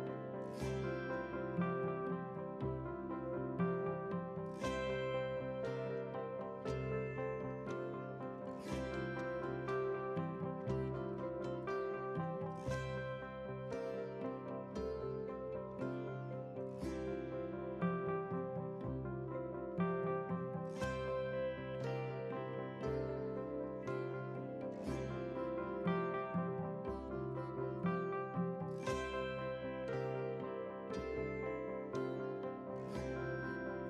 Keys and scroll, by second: 0.0 ctrl+a, 0.4 ctrl+c, 2.6 ctrl+v.